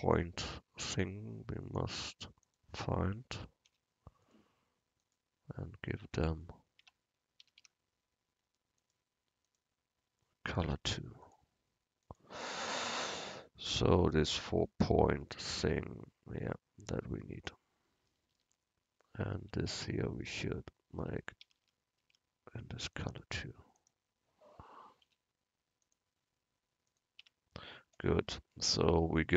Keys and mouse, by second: 0.1 Tab, 3.7 u, 6.0 Tab, 6.9 Tab, 7.5 a, 7.7 a, 10.7 u, 19.5 Tab, 21.1 Tab, 21.5 a, 21.7 a, 22.1 a, 25.1 u, 27.3 Tab.